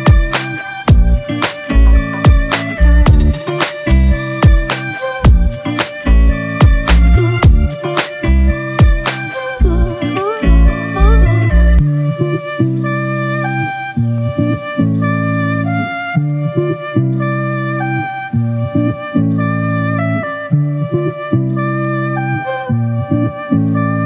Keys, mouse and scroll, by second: 1.8 ctrl+=, 2.3 ctrl+=, 12.0 double click, 14.6 ctrl+z, 17.9-18.2 typing.